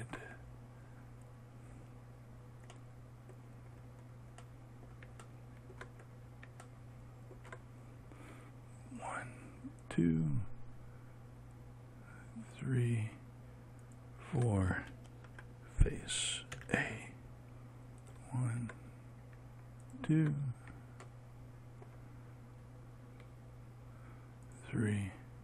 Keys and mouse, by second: 17.1 a.